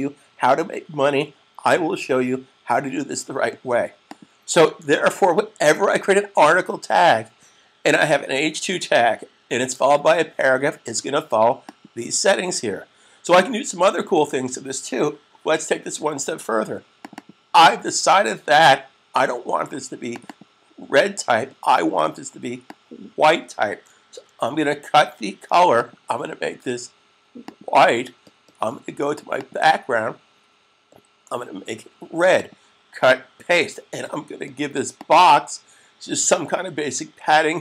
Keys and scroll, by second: 4.8 super+s, 24.4 super+x, 34.9 super+v.